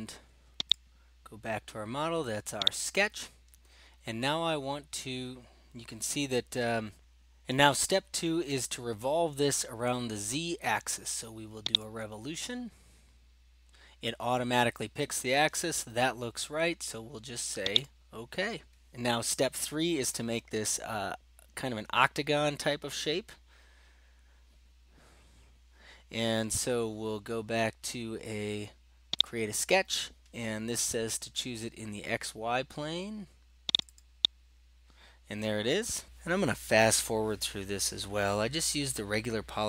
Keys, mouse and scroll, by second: 0.7-1.9 drag, 2.7-3.8 drag, 11.8-13.0 drag, 13.3-13.7 scroll, 14.1 scroll down 5, 17.9 click, 29.2 click, 33.8 click, 34.0 click, 36.2 middle click, 36.5 middle click, 39.3 click.